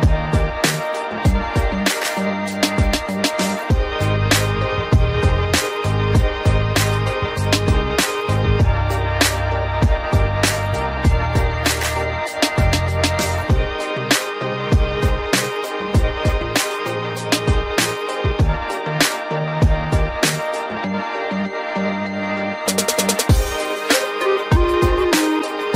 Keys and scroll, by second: 17.0 ctrl+0.